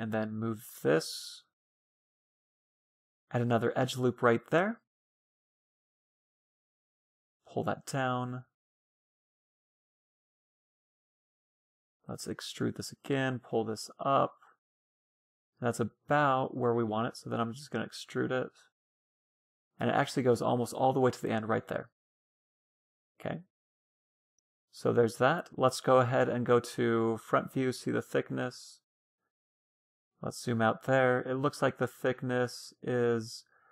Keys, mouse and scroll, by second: 2.0-5.1 middle drag, 4.2 ctrl+r, 5.2 a, 5.4 c, 5.9-7.6 right drag, 6.3-8.1 drag, 8.1 middle click, 8.5 a, 8.9 b, 9.8 e, 11.2 a, 12.0 c, 12.9-14.7 drag, 15.8 c, 16.7 e, 21.4 a, 21.6-25.0 middle drag, 25.7-27.5 middle drag, 27.5 scroll up 1, 27.7-28.0 scroll down 1, 28.0-33.4 middle drag, 33.2-33.7 scroll up 1.